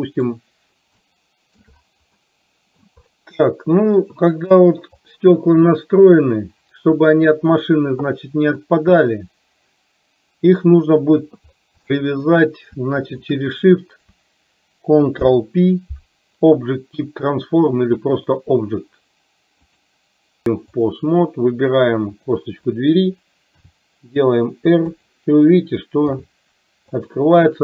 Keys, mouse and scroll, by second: 1.1-1.6 shift+middle drag, 2.4-2.9 middle drag, 3.7 middle click, 5.1 click, 8.9-11.4 drag, 12.1 shift+middle click, 13.1 shift+click, 15.2 ctrl+p, 20.4 click, 22.2 click, 23.6 r, 26.1 r.